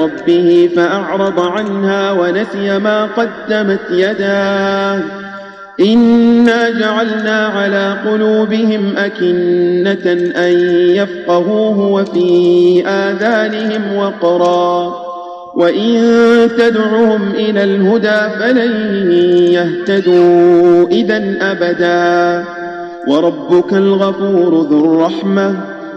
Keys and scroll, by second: 2.5 Tab, 6.3 space, 16.3 Tab.